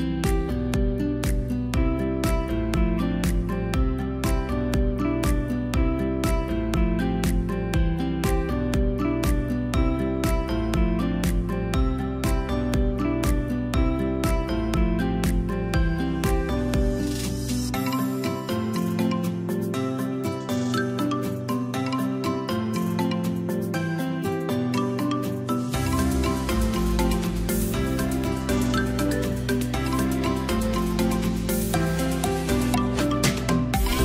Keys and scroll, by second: 7.9 i, 9.9 v, 11.1 i, 12.0 v, 13.2 i, 13.9 v, 15.0 shift+i, 15.7 v, 22.4 space, 24.6 Delete, 28.0 a, 29.6 v.